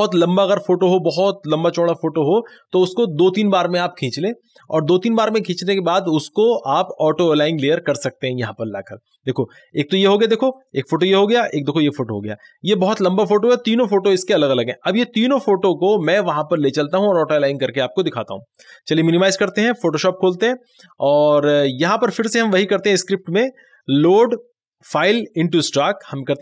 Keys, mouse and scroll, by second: 10.6 click, 10.6 click, 18.6 click, 22.0 click, 22.1 click, 25.7 click.